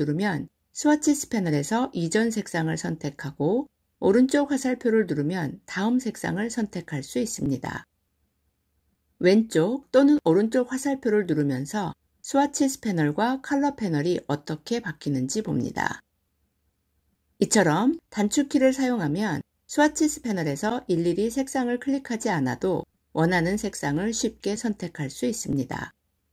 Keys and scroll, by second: 2.3 Left, 7.3 Right.